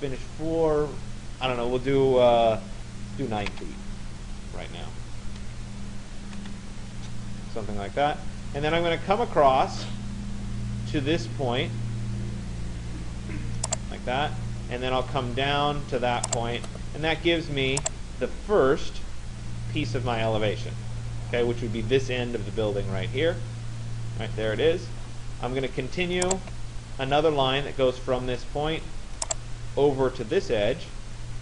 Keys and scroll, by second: 3.1 9, 6.4 Return.